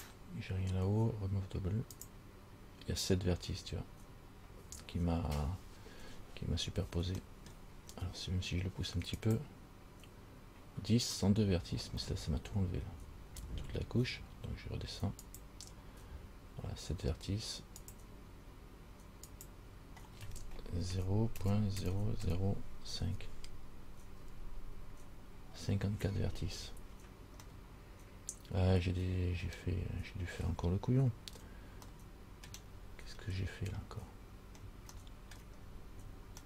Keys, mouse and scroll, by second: 2.1 click, 6.6-7.3 scroll down 2, 9.4 click, 12.2 middle click, 15.4 click, 18.1 click, 19.5 click, 27.7 middle click, 29.8-30.8 scroll down 3, 31.5 z, 32.2 middle click, 32.9-33.4 scroll up 4, 34.0-34.7 scroll down 2, 35.1 shift+middle click, 35.8-36.4 scroll up 5.